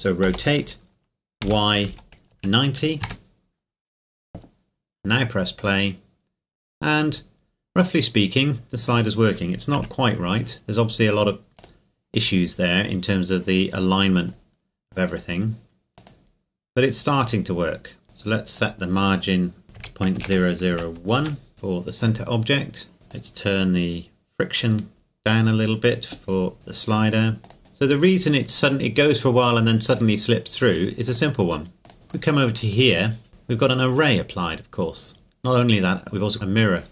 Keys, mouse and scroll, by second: 0.2 r, 1.4 y, 1.8 KP_9, 2.3 KP_0, 3.0 KP_Enter, 3.9-5.6 scroll down 1, 5.6 click, 9.7 KP_1, 11.1 click, 15.9 click, 18.5 click, 19.7 KP_Decimal, 20.1 KP_0, 20.7 KP_1, 21.1 KP_Enter, 23.1 click, 27.4 click, 31.1 click, 31.9 right click, 32.1 click, 33.3 middle click.